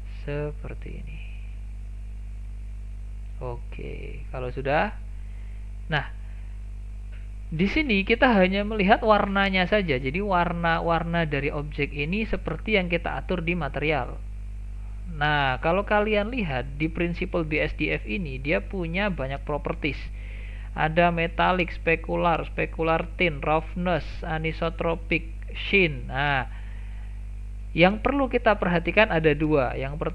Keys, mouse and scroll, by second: 1.1-1.9 scroll down 5, 1.9 shift+middle click, 2.4 scroll down 2, 2.6-5.4 shift+middle drag, 5.4 click, 10.9 middle click, 11.4-11.7 scroll up 3, 11.7-12.4 middle drag, 12.4 scroll up 1, 12.6-15.7 scroll down 3, 15.7 shift+middle click, 16.5-17.1 scroll up 3, 17.1-17.8 shift+middle drag, 17.8 scroll up 1, 18.4 shift+middle click, 18.9-19.2 scroll up 4, 19.2 shift+middle click, 20.0 scroll down 1, 20.2-23.2 shift+middle drag, 26.9-27.6 scroll down 4, 27.6-28.3 shift+middle drag, 28.3 scroll down 2, 28.5-30.1 shift+middle drag.